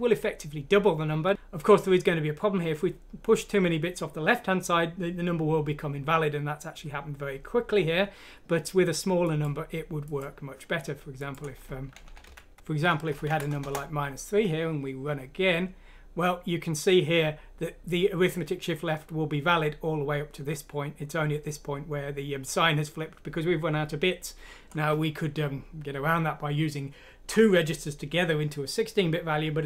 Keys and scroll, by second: 13.2 BackSpace, 13.3 F6, 13.6 Return.